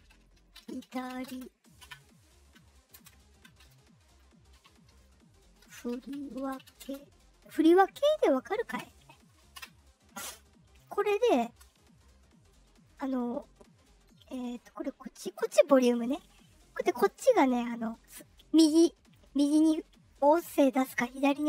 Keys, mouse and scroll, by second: 0.0-1.7 typing, 1.7 Return, 2.9 space, 4.0-7.2 typing, 8.6 Return, 9.5 Return, 11.4 space, 19.1-21.4 drag.